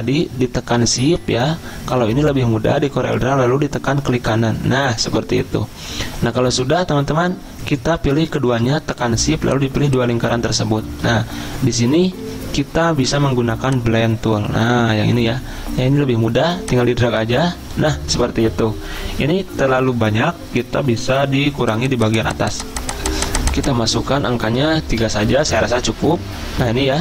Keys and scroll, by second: 10.9 ctrl+z, 24.5 3, 25.0 Return.